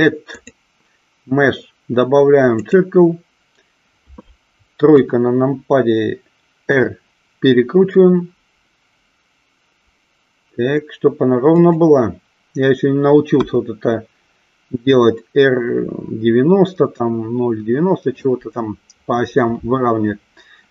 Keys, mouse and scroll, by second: 0.3 click, 4.8 KP_3, 6.8 r, 11.5 click, 13.3 KP_1.